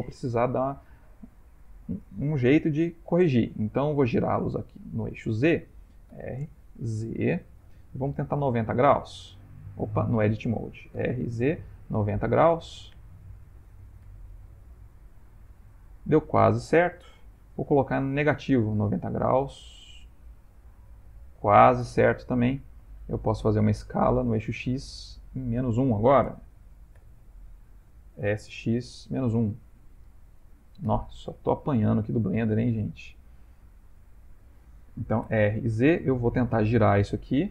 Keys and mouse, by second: 1.1 Tab, 6.1 r, 10.0 Tab, 10.9 r, 13.2 a, 14.0 r, 22.7 ctrl+middle click, 22.9 ctrl+middle click, 25.3 ctrl+middle click, 27.0 r, 28.2 s, 31.5 ctrl+middle click, 32.2 shift+middle click, 32.9 ctrl+middle click, 35.2 r.